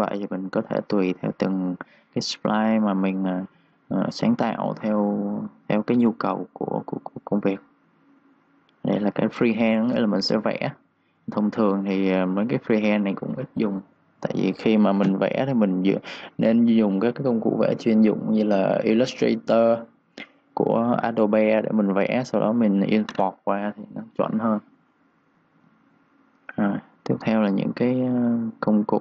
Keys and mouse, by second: 0.0-1.1 typing, 0.3 click, 0.7 click, 5.8 3, 6.3 3, 7.1 click, 25.3 click, 25.7 3, 26.0 click, 26.2 3, 27.1 click.